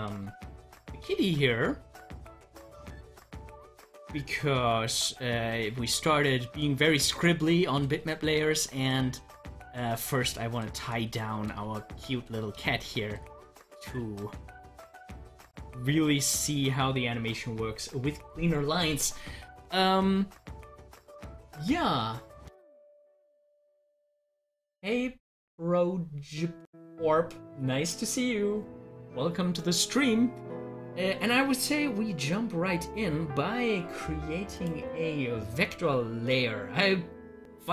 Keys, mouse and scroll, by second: 4.2 KP_Add, 4.3 Right, 4.5 KP_Add, 4.5 Right, 4.9 KP_Add, 5.0 Right, 5.4 KP_Add, 5.5 Right, 7.5 Right, 8.8 KP_Add, 8.9 Right, 10.6 KP_Add, 10.6 Right, 11.5 Right, 12.0 KP_Add, 12.1 Right, 12.2 KP_Add, 12.3 Right, 14.2 Right, 15.3-18.9 drag, 34.5 click.